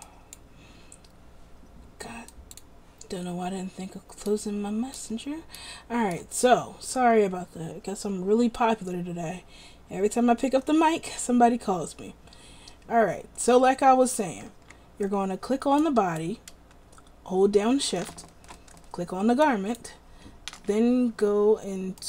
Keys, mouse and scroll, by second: 14.7 a.